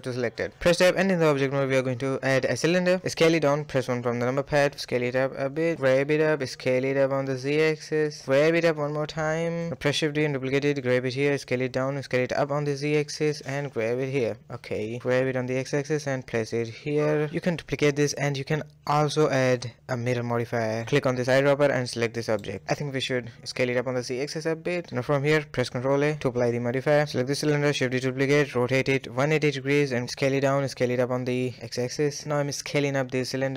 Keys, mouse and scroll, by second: 0.5 Tab, 1.0 a, 1.1 a, 3.1 s, 4.2 KP_1, 4.3 scroll up 4, 4.5-5.3 shift+middle drag, 5.3 s, 6.0 g, 7.1 s, 8.2-8.6 scroll down 2, 8.6 g, 10.1 shift+d, 10.7 s, 11.6 s, 12.1 g, 13.7-14.5 middle drag, 14.5 g, 16.3-17.6 middle drag, 17.6-20.7 drag, 21.7 KP_1, 22.0-22.6 scroll up 3, 22.6-23.4 shift+middle drag, 23.4 s, 25.5 ctrl+a, 26.7 click, 27.0 shift+d, 28.4 r, 28.8 g, 29.6 s, 31.8 click, 32.3 s, 33.4 g.